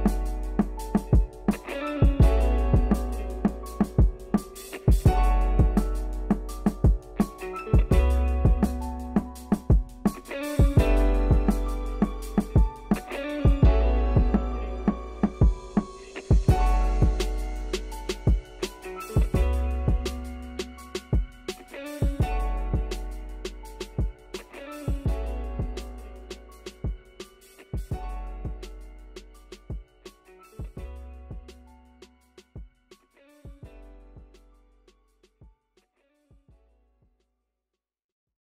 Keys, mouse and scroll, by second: 0.4 Tab, 0.6-1.9 middle drag, 1.9 Tab, 2.1 middle click, 2.6 ctrl+r, 4.1-5.6 middle drag, 5.6 ctrl+z, 5.8 middle click, 6.2 ctrl+r, 9.0 middle click, 9.5 3, 9.6 click, 10.2 x, 11.1 middle click, 11.4 Tab, 12.0-13.0 middle drag, 13.5 scroll up 2, 13.7 middle click, 14.4 ctrl+z, 14.4 ctrl+z, 14.7 ctrl+z, 14.8 ctrl+z, 15.0 ctrl+z, 15.4 scroll down 2, 15.6 middle click, 16.3-17.5 drag, 17.5 Tab, 17.6 middle click, 18.0 scroll down 1, 18.1 middle click, 18.8 click, 19.8-20.4 scroll down 5, 20.9-22.0 drag, 22.3 click, 23.2 click, 23.4 middle click, 23.7 scroll up 2, 23.8 shift+middle click, 24.6-27.0 shift+middle drag, 27.9 scroll down 3, 28.1-29.1 middle drag, 29.3-30.0 scroll up 20, 30.3 click, 30.4 scroll down 2, 30.5 Tab, 30.7 middle click, 31.1 scroll up 1, 31.2-34.9 middle drag, 34.9 Tab, 35.9-36.9 shift+middle drag, 36.9 scroll up 1, 37.1 shift+middle click, 37.3 Tab, 37.6 middle click, 38.4 Tab.